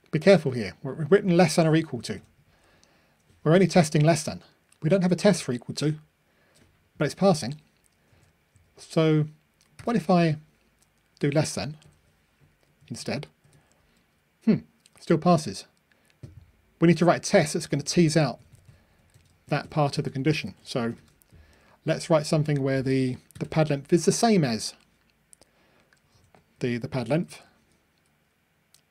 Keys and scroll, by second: 11.8 Delete, 11.8 super+F9, 20.5 super+c, 21.0 super+v, 27.1 ctrl+r.